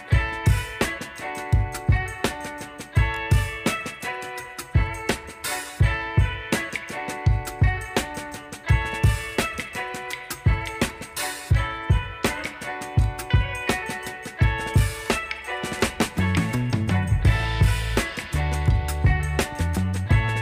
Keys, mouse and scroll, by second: 0.0-0.7 typing, 2.9 click, 5.4-12.8 alt+shift+drag, 12.8 right click, 14.9 click, 18.5-20.4 alt+drag.